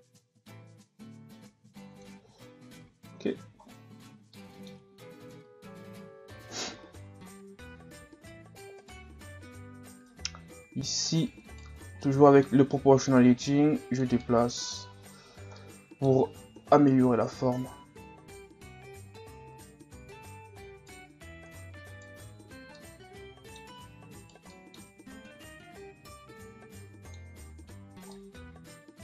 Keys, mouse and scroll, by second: 2.7 z, 3.0 Tab, 3.4 a, 3.6 scroll down 3, 4.4 middle click, 5.3 KP_1, 6.1-7.2 scroll up 11, 7.7 Tab, 8.1 scroll up 2, 8.8 right click, 10.1 right click, 11.8 scroll down 3, 12.0-13.2 middle drag, 13.2 click, 14.2 middle click, 14.9 Tab, 15.3 scroll down 1, 15.6 middle click, 16.6 KP_1, 17.3 scroll up 2, 18.2 scroll down 4, 18.4-18.8 scroll up 1, 18.9 Tab, 19.5 right click, 21.5 right click, 22.2 scroll down 1, 22.4 Tab, 22.7-23.7 middle drag, 23.7 Tab, 24.2 right click, 24.5 middle click, 25.3-27.5 drag, 27.5 Tab, 27.8 scroll down 2, 28.1-29.0 middle drag.